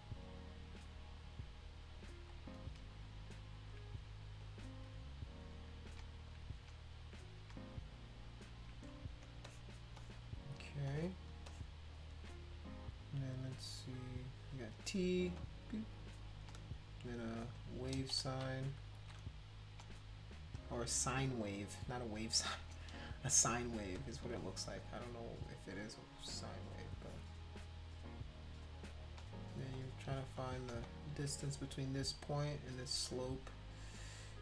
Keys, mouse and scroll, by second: 2.5 click, 3.4 shift+click, 4.3 click, 4.8 click, 5.4 click, 6.4 click, 7.2 click, 8.0 shift+click, 8.4 shift+click, 9.2 space, 9.5 click, 10.0 click, 10.9 click, 11.5 click, 14.2 click, 14.7 click, 15.4 click, 16.0 click, 17.3 shift+click, 17.5 shift+click, 18.2 ctrl+z, 18.9 ctrl+z, 19.5 click, 20.5 shift+click, 22.5 click, 24.0 shift+click, 25.3-27.2 drag, 28.8 click, 29.7 shift+click, 30.4 click, 30.8 shift+click, 33.2 click, 33.8 click, 34.0 click.